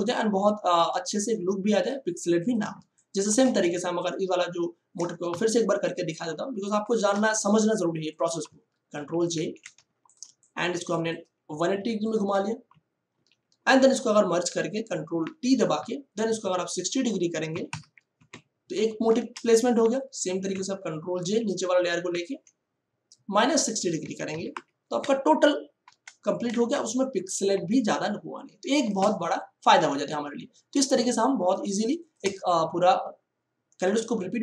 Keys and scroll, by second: 5.2 Delete, 8.9 ctrl+j, 9.3 ctrl+t, 12.1 Return, 13.1 ctrl+e, 14.2 ctrl+j, 15.2 ctrl+t, 17.4 6, 17.7 0, 18.1 Return, 21.2 ctrl+j, 22.1 ctrl+t, 24.0 KP_Subtract, 24.3 6, 24.5 0, 24.8 Return, 27.4 space, 30.8 space.